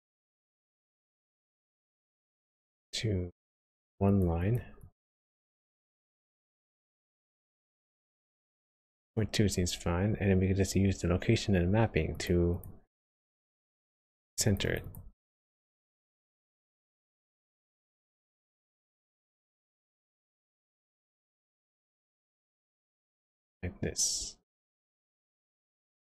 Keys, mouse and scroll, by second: 1.2 click, 3.6 click, 4.0 click, 4.4 click, 4.8 click, 5.2 click, 5.3 click, 5.5 click, 7.4 click, 12.1 click, 12.5 click, 13.9 click, 14.3 click, 14.5 click, 14.7 click, 14.8 click, 17.0 click, 18.7 click, 20.0 click, 21.6 click, 22.9 middle click.